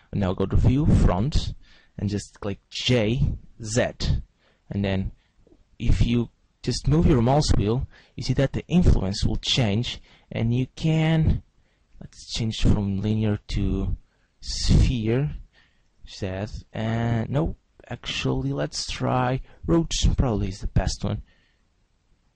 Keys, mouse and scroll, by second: 0.0 click, 2.9 g, 11.7 right click, 12.7 click, 13.7 click, 15.4 g, 17.4 right click, 18.5 click, 20.6 g.